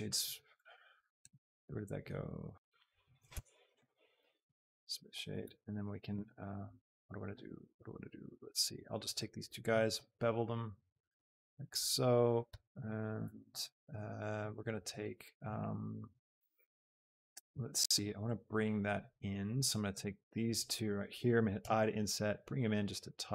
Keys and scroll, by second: 1.0 a, 3.5 Tab, 5.4 Tab, 10.1 ctrl+b, 14.9 Tab, 21.5 shift+i.